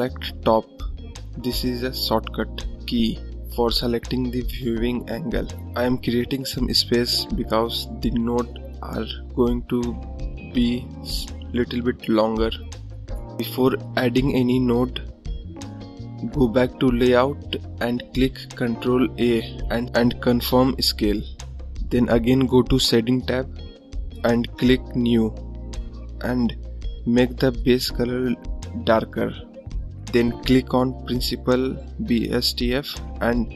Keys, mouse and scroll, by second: 0.6-1.6 scroll up 1, 1.6-2.6 scroll up 1, 2.6 click, 3.5-4.1 scroll up 3, 4.1-7.0 drag, 9.1-10.0 scroll up 1, 10.2 click, 11.1-11.5 scroll down 3, 17.7 ctrl+a, 21.0 click, 22.4 scroll down 2, 22.6-27.5 drag.